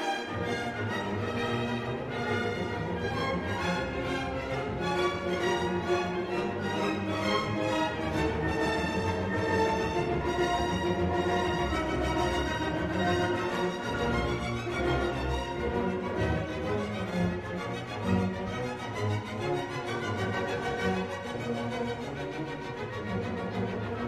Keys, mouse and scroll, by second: 2.3-3.4 drag, 4.7 click, 7.1 click, 8.0 click, 9.0 2, 10.1 0, 12.5 click, 14.9 3, 15.4 0, 17.8-18.2 scroll down 2, 19.5 click, 20.8-23.2 drag, 23.9 click.